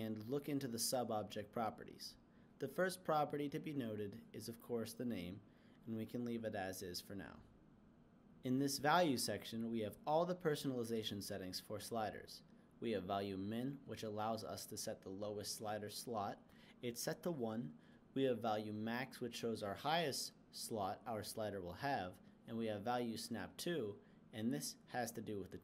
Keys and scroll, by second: 16.8-19.0 typing, 19.3 Return.